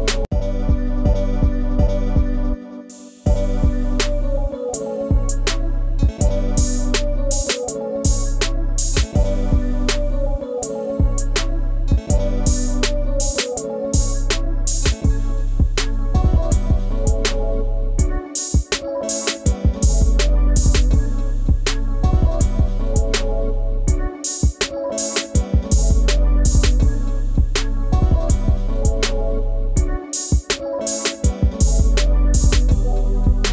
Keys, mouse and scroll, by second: 2.8 ctrl+click, 3.0 ctrl+space, 7.9 ctrl+2, 11.7 ctrl+g, 15.9 double click, 17.5 shift+click, 25.6-26.0 scroll up 1, 26.0 ctrl+space, 26.0 ctrl+click, 26.3 ctrl+space, 29.8-30.8 scroll down 1, 32.6 space, 32.6 ctrl+click, 33.0 ctrl+scroll down 1.